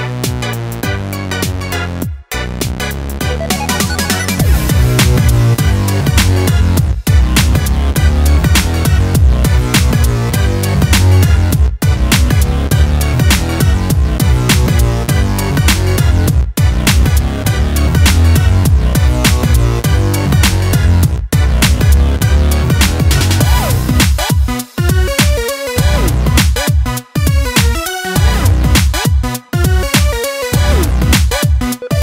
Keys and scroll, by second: 12.2 ctrl+space.